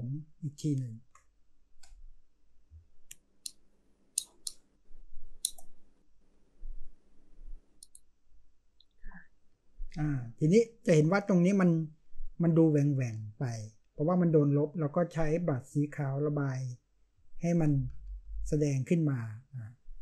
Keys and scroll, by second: 17.6-18.2 typing.